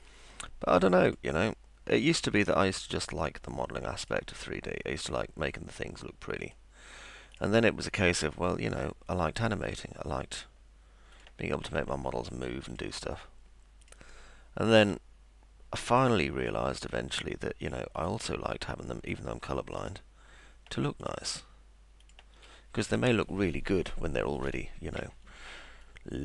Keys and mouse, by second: 1.0 click, 4.0 click, 6.4 click, 7.4 click, 8.3 click, 9.7 ctrl+click, 11.2 ctrl+click, 12.7 ctrl+click, 13.8 ctrl+click, 14.7 ctrl+click, 15.9 ctrl+click, 18.0 ctrl+click, 19.8 ctrl+click, 21.0 ctrl+click, 22.0 ctrl+click.